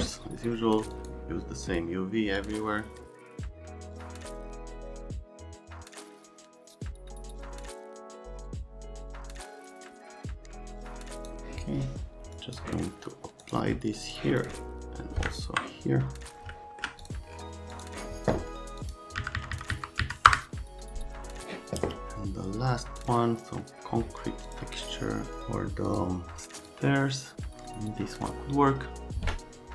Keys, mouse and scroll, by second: 2.3 click, 3.2 click, 3.5 click, 3.7 click, 3.9 click, 4.1 click, 4.5 click, 4.6 click, 4.9-5.4 typing, 5.2 Tab, 5.4 KP_Enter, 5.9 click, 6.1 Delete, 6.2 click, 6.6 click, 6.7 click, 6.8 click, 7.1 click, 7.4 click, 7.7 click, 7.9 click, 8.3 KP_Decimal, 8.4 KP_4, 8.8 click, 9.0 KP_Decimal, 9.0 KP_3, 9.1 KP_Enter, 9.4 click, 10.0 click, 10.4 click, 10.6 click, 11.0 right click, 12.3 right click, 13.4 right click, 14.1 click, 15.3 ctrl+click, 16.5 alt+middle click, 17.0 click, 17.7 click, 18.8 click, 19.2 Down, 19.3 Down, 19.5 Down, 19.7 Down, 20.0 Down, 20.2 Return, 23.0 click, 24.4 click, 25.8 click, 26.6 click.